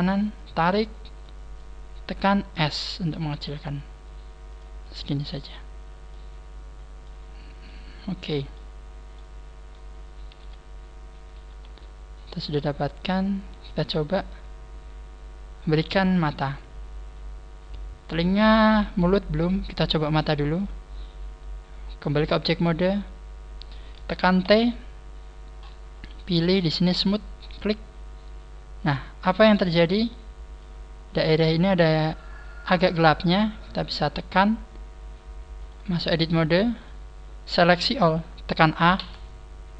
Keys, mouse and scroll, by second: 0.3 click, 1.6 middle click, 2.6 s, 4.8 click, 4.8 middle click, 5.7-6.0 scroll down 2, 6.0 middle click, 7.2-7.6 scroll down 4, 7.6 middle click, 8.8-9.1 scroll down 2, 9.1 middle click, 10.3 KP_1, 11.4 KP_3, 12.2-12.6 scroll down 5, 18.3-19.8 scroll up 1, 20.5 click, 24.4 t, 25.2 scroll up 4, 26.4 scroll up 15, 27.3 click, 27.5 click, 27.5-28.0 scroll up 1, 29.5 middle click, 30.8 scroll up 1, 31.6-32.1 scroll up 4, 32.5 scroll down 4, 36.0 click, 36.8 click, 38.9 a.